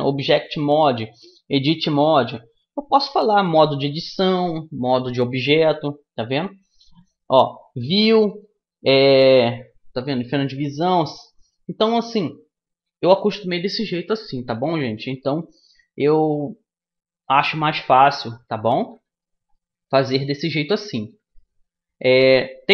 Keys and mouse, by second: 6.0-7.9 middle drag, 11.6-17.7 middle drag, 17.9-22.5 middle drag, 18.6 a, 20.0-21.7 drag.